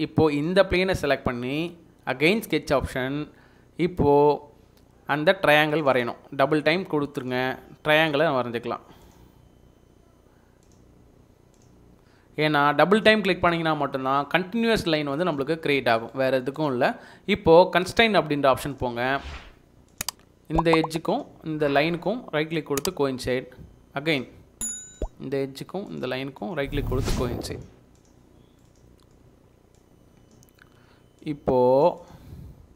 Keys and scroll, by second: 13.3 Escape, 13.7 Escape, 30.6 Escape.